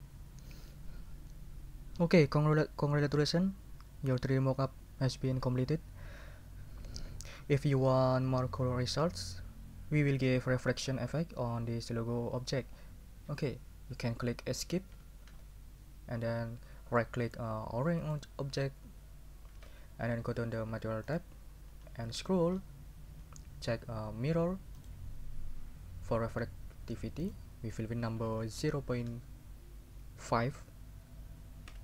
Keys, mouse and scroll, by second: 14.9 Escape, 15.8 scroll up 2, 18.0 right click, 21.1 click, 22.1-22.5 scroll down 2, 24.8 click, 27.2 click, 28.6 0, 29.1 ., 30.3 5, 31.7 Return.